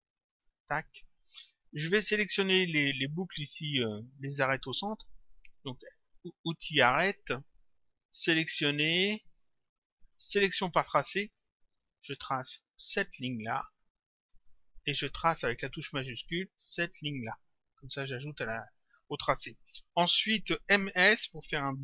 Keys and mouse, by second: 4.9 click, 8.1 click, 10.6 click, 12.0 click, 16.3 click.